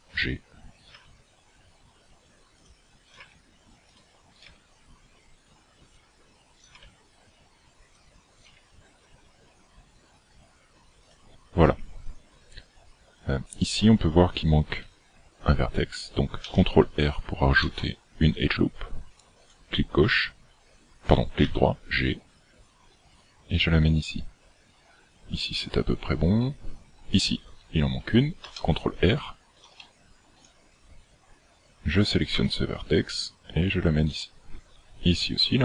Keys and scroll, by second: 1.0 g, 3.2 g, 4.5 g, 6.9 g, 8.5 g, 16.4 ctrl+r, 21.5 g, 28.4 ctrl+r, 32.4 g.